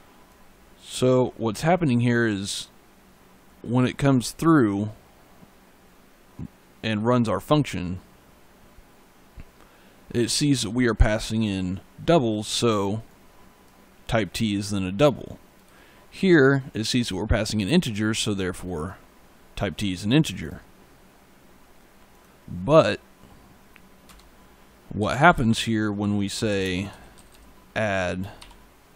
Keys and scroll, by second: 1.4 e, 23.9 Return, 24.6-27.0 typing, 28.2 shift+9.